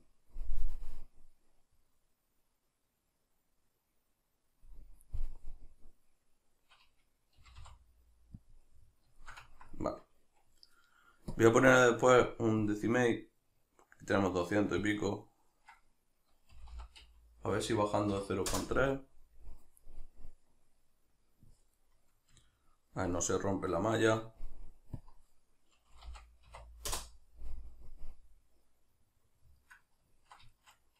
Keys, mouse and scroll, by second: 4.7 click, 5.2-8.6 middle drag, 7.4 g, 8.6 click, 8.6-11.4 middle drag, 11.4-21.7 drag, 20.2 Return, 21.7-24.9 middle drag, 24.9-29.6 drag, 29.0 Return, 29.6-30.9 middle drag.